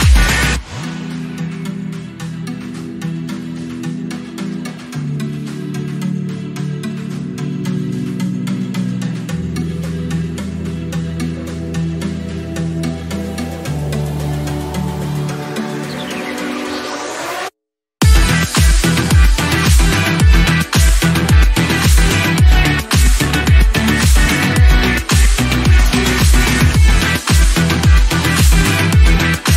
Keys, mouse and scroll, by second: 0.9 middle click, 1.4 click, 3.7 Home, 7.2-8.8 drag, 8.8 KP_7, 9.1-10.1 scroll up 8, 9.5 shift+middle click, 10.1 shift+middle click, 11.0 alt+z, 11.8 alt+z, 12.4 click, 13.5-16.8 drag, 19.3 click, 19.8 a, 22.1 scroll down 6, 22.9 click, 22.9 scroll down 4, 23.1 scroll up 3, 23.6-26.2 shift+middle drag, 26.2-27.4 drag, 28.7-29.5 drag.